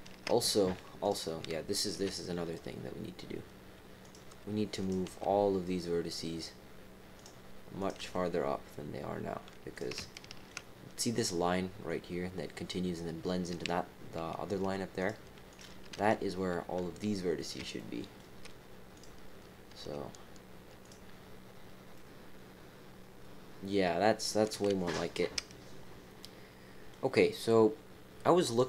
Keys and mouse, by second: 1.0 click, 1.9 g, 4.8 click, 5.0 g, 7.8 click, 7.9 g, 10.1 shift+click, 15.0 click, 15.5 click, 15.9 g, 17.7 shift+click, 17.9 middle click, 18.9 click, 19.6 g, 21.9-24.8 middle drag, 26.2 middle click.